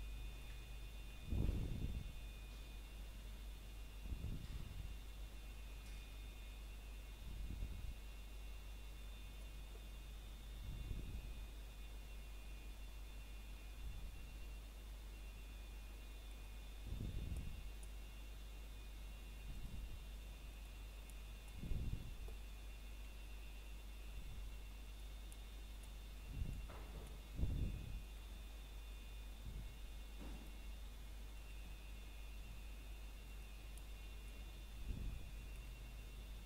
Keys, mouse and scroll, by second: 2.4 click, 3.9 e, 7.0 click, 7.3 scroll up 1, 8.2 s, 9.4 click, 9.8 scroll up 1, 13.4 click, 22.8 scroll down 1, 23.3 shift+middle click, 23.5 scroll up 1, 24.5 alt+click, 25.8 s, 27.2 click, 28.2 alt+click, 28.6 scroll down 1, 28.8 shift+middle click, 29.0 scroll up 1, 30.7 s, 32.3 click, 32.6 scroll down 1, 33.0 shift+middle click, 33.2 scroll down 1, 34.3 middle click, 35.0 scroll up 1, 35.0 typing, 35.5 middle click.